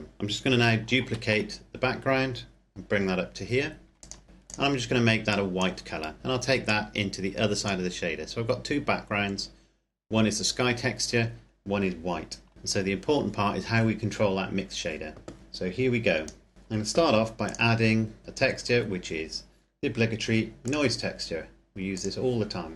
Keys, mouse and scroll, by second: 0.9 shift+d, 3.8 click, 4.2 scroll up 1, 4.4 click, 6.6 click, 7.9-10.1 scroll down 1, 12.5 click, 15.4 click, 16.5 shift+middle click, 17.4 click, 20.6 click.